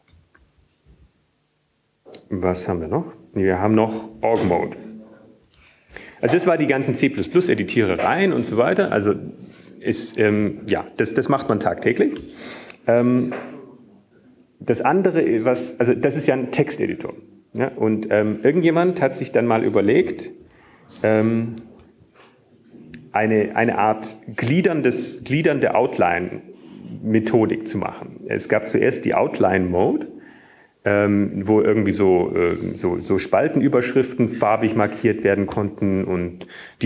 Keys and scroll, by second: 24.3 super+q, 28.6 super+e.